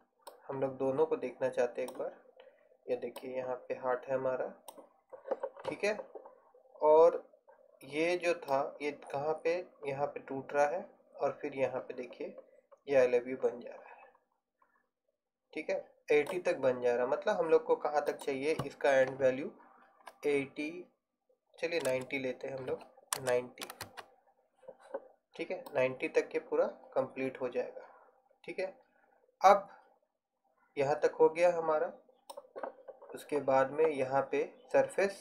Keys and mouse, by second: 0.8-2.7 drag, 4.1-5.2 drag, 18.2-27.7 drag.